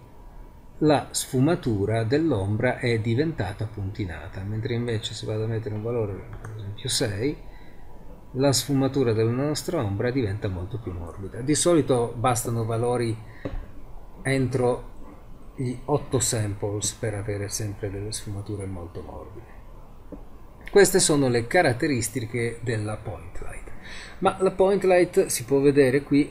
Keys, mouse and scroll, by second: 1.6-1.9 middle drag, 14.4-15.8 middle drag.